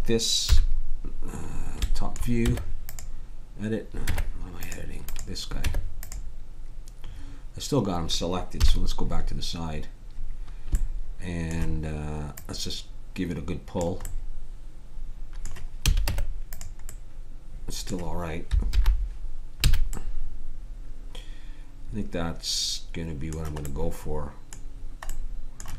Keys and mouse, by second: 0.4 KP_7, 2.4 Tab, 4.1 Tab, 5.1 right click, 5.6 Tab, 7.1-8.7 middle drag, 8.5 KP_3, 10.7 middle click, 11.2 click, 13.7 click, 14.0 right click, 15.3 middle click, 15.8 a, 16.0 Tab, 18.7 alt+h, 19.7 a.